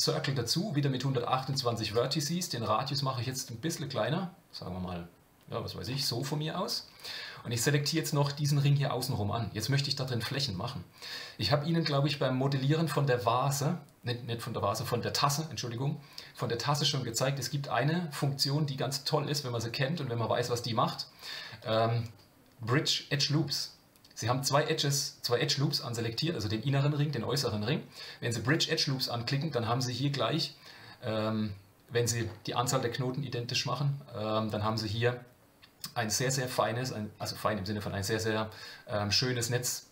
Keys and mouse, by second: 2.6-5.8 shift+drag, 8.1-9.6 middle drag, 21.6-28.5 drag, 29.4-32.3 middle drag.